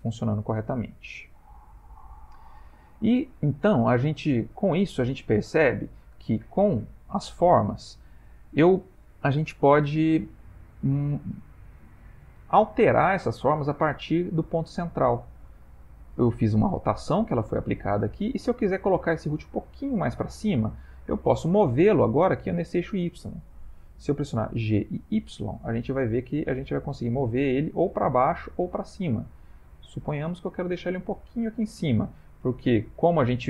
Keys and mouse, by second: 0.7-2.8 middle click, 2.6 middle click, 3.3 middle click, 4.0-4.6 ctrl+middle click, 4.8-5.3 shift+middle click, 6.2 click, 7.6 Tab, 17.7 middle click, 21.0 middle click, 24.7 g, 31.9 middle click.